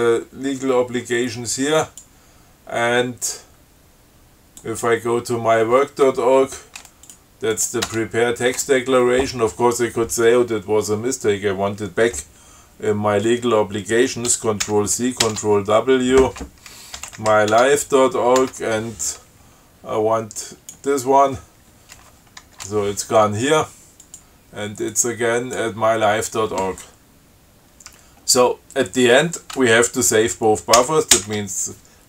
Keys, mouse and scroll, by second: 2.0 click, 4.8 click, 7.3 click, 7.8 click, 8.1 Tab, 14.9 ctrl+c, 17.0-18.1 typing, 18.6 Tab, 20.7 click, 24.3 click, 25.2 click, 31.0 ctrl+x, 31.4 ctrl+s.